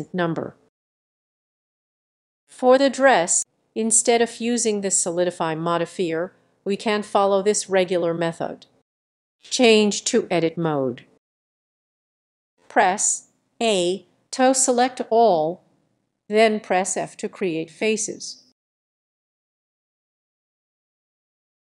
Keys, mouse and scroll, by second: 0.0 click, 0.7 click, 1.3-1.7 click, 1.6 click, 2.1 click, 3.4 click, 4.7-6.2 drag, 6.2 middle click, 6.7-7.2 scroll down 3, 7.6 middle click, 8.1-9.8 drag, 9.8 middle click, 10.6-11.1 scroll down 5, 11.2-12.3 scroll, 14.4 click, 14.8 a, 15.6 f, 17.1 click, 19.7 click, 19.9 scroll.